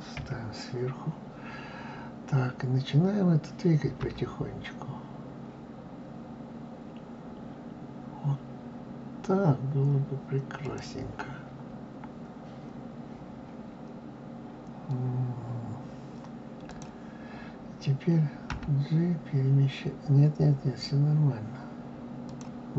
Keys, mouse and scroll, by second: 0.0 KP_1, 3.9 g, 16.6 click, 18.4 g.